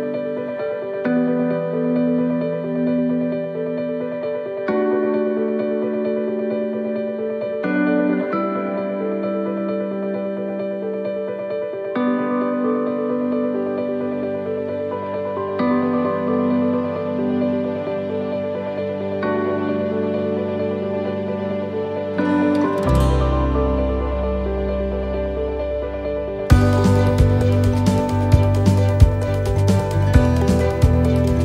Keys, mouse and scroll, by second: 3.8 middle click, 4.1 scroll down 1, 4.6 middle click, 5.0 scroll down 2, 5.8 shift+middle click, 6.3 scroll up 1, 7.2 shift+middle click, 7.2 scroll up 5, 8.6-9.1 scroll down 4, 9.0 shift+middle click, 9.7 scroll up 1, 10.2 shift+middle click, 11.0 scroll down 1, 11.5 middle click, 11.9 scroll down 1, 13.1 middle click, 14.1 shift+middle click, 14.7-15.3 scroll up 2, 15.2 shift+middle click, 16.4 shift+middle click, 16.4 scroll up 1, 17.6 shift+middle click, 19.5 scroll down 1, 19.9 shift+middle click, 20.7 scroll down 1, 21.7 scroll down 1, 23.0 shift+middle click, 23.2-23.8 scroll up 2, 23.7 shift+middle click, 24.0-24.8 shift+scroll down 6, 25.3 shift+middle click.